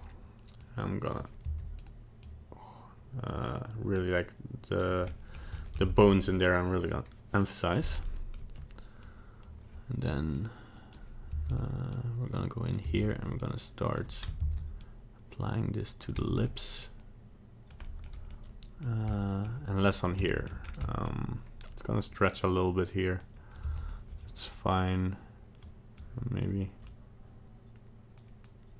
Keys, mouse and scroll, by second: 0.6 click, 1.4 f, 2.2 click, 5.1 middle click, 5.6 shift+middle click, 5.7 middle click, 8.0 middle click, 9.0 click, 10.3 click, 11.3 f, 11.9 click, 12.9 f, 13.4 click, 14.5 ctrl+z, 14.8 click, 16.2 middle click, 16.8 click, 17.8 middle click, 18.3 middle click, 19.3 middle click, 20.2 shift+middle click, 20.3 shift+middle click, 20.4 shift+scroll down 1, 20.6 scroll up 2, 20.8 middle click, 21.1 middle click, 21.7 click, 23.6 f, 25.6 click, 26.4 click.